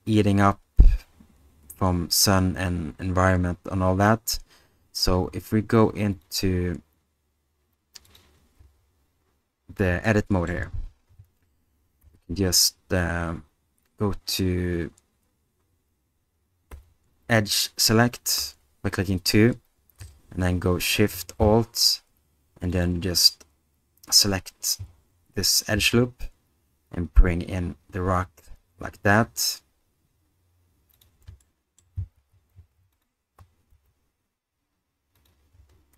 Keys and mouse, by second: 8.6 Tab, 10.1 middle click, 12.0 alt+3, 16.7 2, 18.4 2, 22.7 click, 25.8 s, 30.9 click, 31.4 middle click, 32.9 alt+click, 33.7 alt+s, 35.5 Tab.